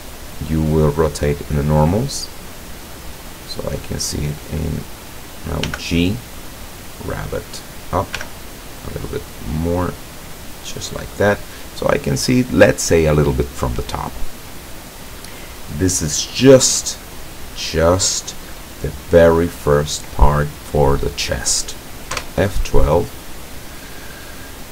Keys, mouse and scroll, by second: 4.6 click, 5.7 g, 7.3 click, 8.2 g, 11.1 click, 22.2 F12.